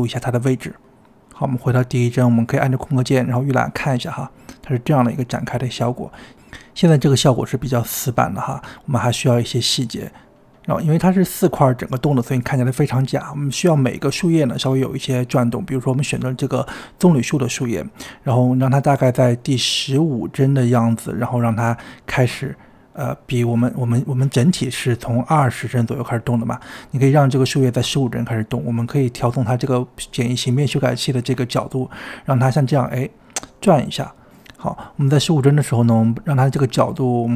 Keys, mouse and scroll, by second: 0.1 i, 1.5-2.8 drag, 2.8 space, 4.5 space, 5.2-6.4 drag, 6.4 space, 8.2 space, 9.1-11.9 drag, 11.9-14.6 scroll up 7, 14.6-20.7 drag, 29.3-35.9 drag.